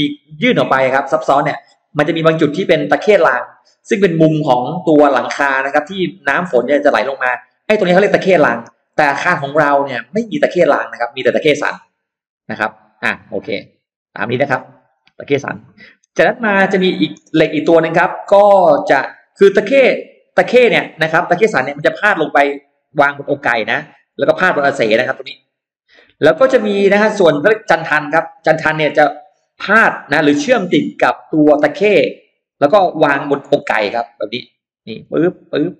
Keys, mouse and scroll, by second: 11.6 click, 12.7 click, 13.9 click, 14.7 click, 19.8-21.1 drag, 21.3 click, 22.4-23.5 drag, 24.0 click, 25.1 click, 27.9 click, 29.2 click, 30.3 click, 31.3 click, 32.3 click, 33.4 click, 34.1 click, 34.8 click, 35.4 click.